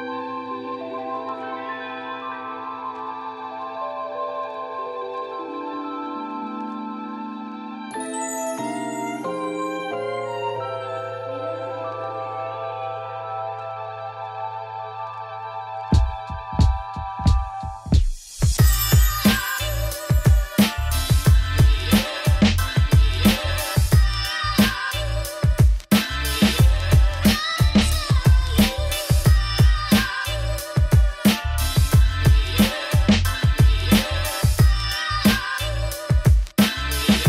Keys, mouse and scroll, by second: 0.3 Tab, 0.6 scroll down 1, 0.8-2.9 middle drag, 3.5 click, 3.6 shift+middle click, 3.9 scroll up 1, 4.1 Tab, 4.5 2, 4.6 alt+click, 5.1 3, 5.2 click, 6.1 Tab, 6.6 click, 7.3 Tab, 7.4 2, 7.9 ctrl+b, 10.3 3, 10.4 alt+click, 10.9 scroll up 1, 14.5 middle click, 14.8 ctrl+z, 15.0 ctrl+r, 15.9 middle click, 16.1 scroll down 1, 16.2 middle click, 16.4 scroll up 1, 16.6 3, 16.7 alt+click, 17.2 middle click, 17.4 alt+e, 19.0 ctrl+b, 20.6 2, 20.7 alt+click, 20.9 alt+shift+click, 21.2 ctrl+b, 23.9 scroll down 1, 24.1 Tab, 24.5 click, 24.7 middle click, 25.5 click, 25.7 scroll up 1, 25.8 Tab, 25.9 2, 26.0 alt+click, 26.6 middle click, 27.4 3, 27.6 alt+click, 27.9 3, 28.0 click, 28.1 middle click, 28.6 ctrl+b, 29.9 scroll down 1, 30.1 middle click, 30.4 scroll up 1, 30.6 shift+middle click, 31.4 2, 31.6 alt+click, 31.8 ctrl+b, 33.7 3, 33.8 click, 34.3 alt+shift+click, 35.2 s.